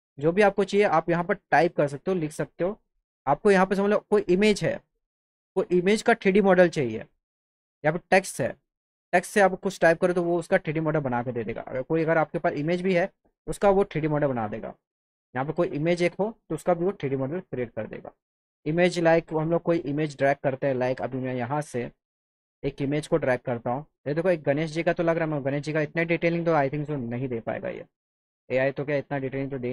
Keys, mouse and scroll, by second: 0.0 click, 4.0 click, 8.1 click, 11.5 click, 12.9 click, 13.9 click, 21.0 click, 22.8 click, 24.6 click, 24.8 click, 28.5 click.